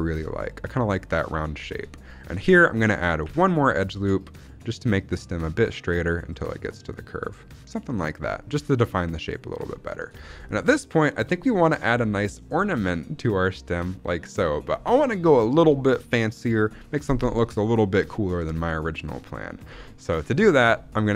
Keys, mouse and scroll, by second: 1.2 z, 1.6 shift+middle click, 1.7-2.4 scroll up 2, 2.4 scroll up 1, 3.1 ctrl+r, 9.4 click, 9.7 shift+middle click, 10.1 scroll down 1, 10.4 shift+middle click, 12.5 middle click, 18.3-18.9 scroll down 1, 18.9 middle click, 18.9 scroll down 1, 19.4 scroll down 1, 19.7 shift+middle click, 20.4 shift+middle click, 20.6-21.1 scroll up 2.